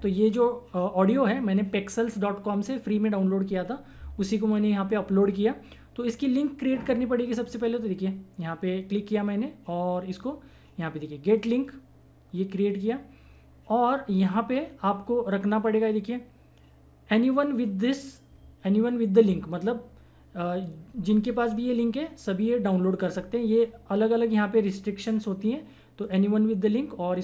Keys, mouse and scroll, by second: 7.4 click, 11.2 click, 23.4 click, 26.0 click.